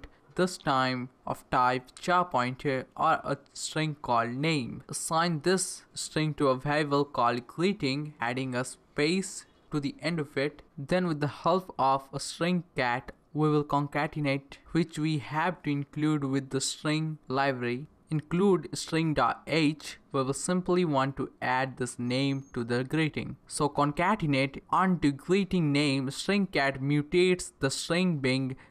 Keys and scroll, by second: 0.3 Return, 0.4-6.6 typing, 7.9-10.4 typing, 9.1 Right, 9.7 Down, 11.7-19.3 typing, 14.6 Left, 16.4 Return, 19.5 Right, 19.8 Left, 20.4-23.7 typing, 22.1 Return, 24.0 Return, 25.4 Return, 26.7-28.7 typing.